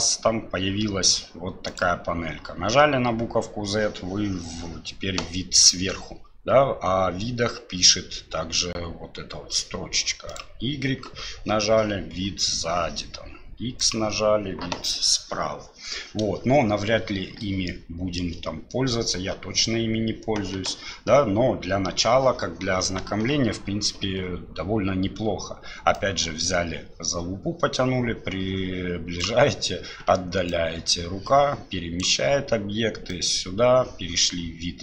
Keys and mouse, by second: 1.7 click, 10.3 click, 13.8 click, 17.7 shift+middle click, 25.9-29.2 drag, 30.5-32.0 drag, 33.1 click.